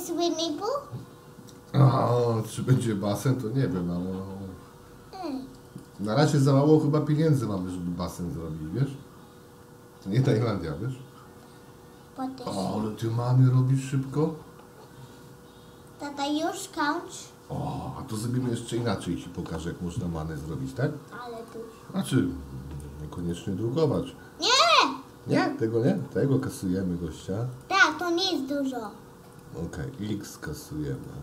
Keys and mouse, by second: 2.8 shift+d, 5.7 click, 7.0 shift+d, 13.6 shift+d, 21.4 click, 22.7 x, 23.9 click, 24.5 x, 26.5 click, 27.2 x, 28.6 x, 29.4 click, 30.0 x.